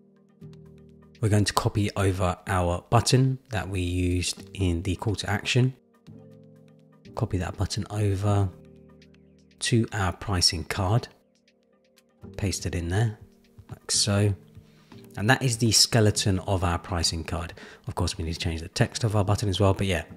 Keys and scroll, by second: 6.7 super+c, 14.1 super+v.